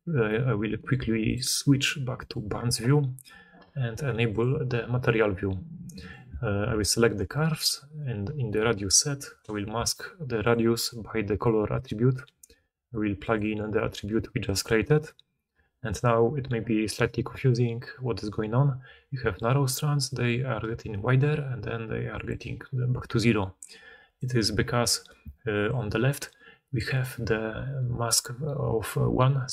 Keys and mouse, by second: 4.3-5.8 middle drag, 5.8 right click, 6.0-10.3 middle drag, 6.6 g, 10.3-29.5 drag, 19.1 d, 22.2-24.3 d, 22.8-29.5 right drag, 24.0-29.5 middle drag, 25.1 d, 25.4-26.9 d.